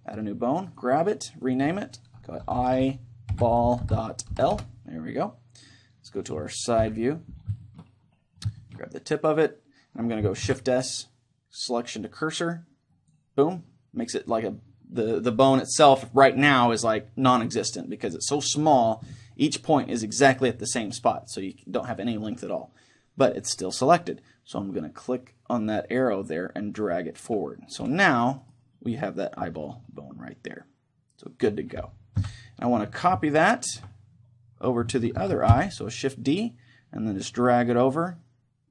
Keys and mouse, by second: 0.6-4.5 right drag, 1.4-4.5 drag, 6.8 KP_3, 7.6-9.2 middle drag, 9.2-11.0 right drag, 10.4 shift+s, 24.8-26.4 drag, 28.4-30.1 right drag, 30.0-31.8 middle drag, 32.2 KP_1, 33.3-35.2 middle drag, 35.2 shift+d.